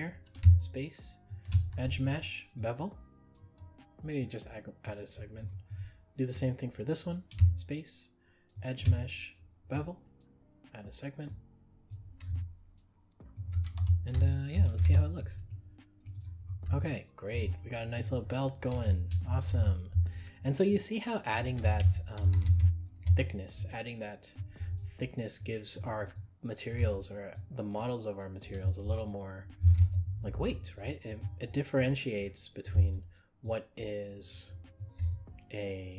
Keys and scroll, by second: 21.8 ctrl+z.